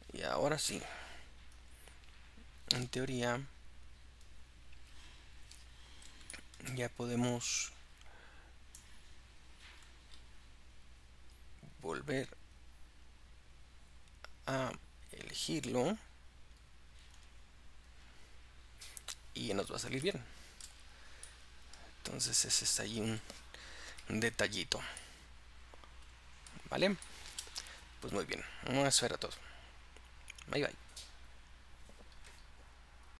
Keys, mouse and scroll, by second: 0.0-3.8 middle drag, 3.8 click, 5.0-5.6 scroll up 4, 5.8 scroll down 2, 6.4-7.7 shift+middle drag, 7.7 click, 9.2 click, 11.3-19.5 drag, 19.5-20.1 scroll up 2, 20.1 shift+middle click, 20.8-21.4 scroll down 3, 21.4 middle click, 22.1-24.0 scroll up 2, 24.0 KP_Decimal, 24.7-25.1 scroll up 1, 25.1-33.2 middle drag, 26.7-27.1 scroll down 2.